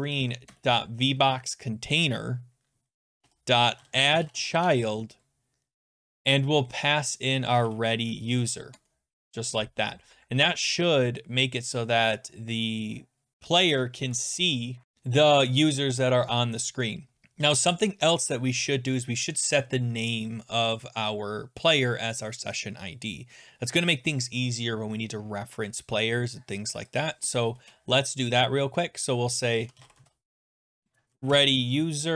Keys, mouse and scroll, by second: 0.5 Return, 0.6 Return, 2.9-5.6 typing, 7.2-8.1 typing, 8.7 Tab, 27.1 click, 27.6 Return, 29.4-30.8 typing, 31.1 Down, 31.3 Return, 32.0-32.1 typing.